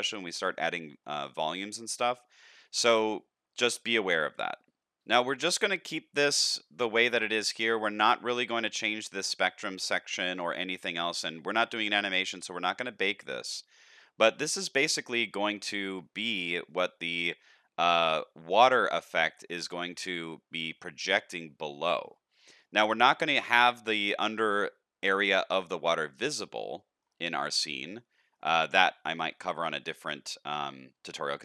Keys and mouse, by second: 1.0 shift+middle drag, 1.4-2.2 middle drag, 2.4-2.8 shift+middle drag, 5.5 click, 8.6 click, 10.1 click, 14.3-15.9 middle drag, 16.2 shift+middle drag, 16.7-17.4 middle drag, 19.2 shift+middle drag, 22.1 shift+middle drag, 22.7-23.0 middle drag, 23.2 shift+middle drag, 23.7 middle click, 24.2-24.6 middle drag, 25.5 shift+middle click, 26.5-27.0 shift+middle drag, 27.4-27.9 middle drag, 28.2 shift+middle click, 28.6 middle click, 29.0 shift+middle drag, 29.6 middle click, 31.2 shift+middle click.